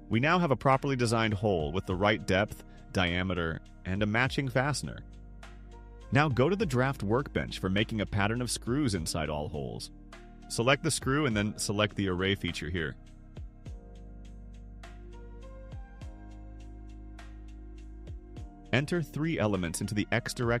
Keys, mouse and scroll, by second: 0.7 click, 1.3-4.0 drag, 8.8 click, 10.6 click, 12.3 click, 17.3 click, 20.4 click.